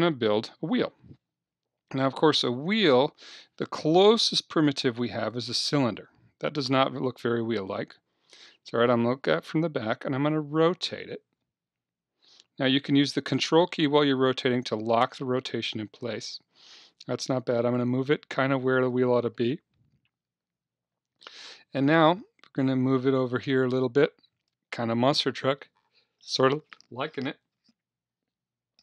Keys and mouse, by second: 2.7 shift+a, 8.0 KP_1, 11.4 r, 14.7-16.5 drag, 17.5-20.0 drag, 20.5 KP_3, 22.0-24.0 drag.